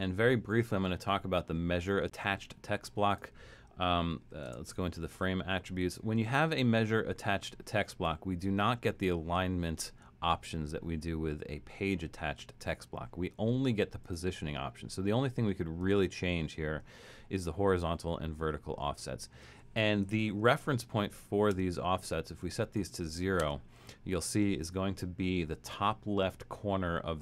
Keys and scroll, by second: 4.5 shift+Return, 21.5 0, 23.5 0.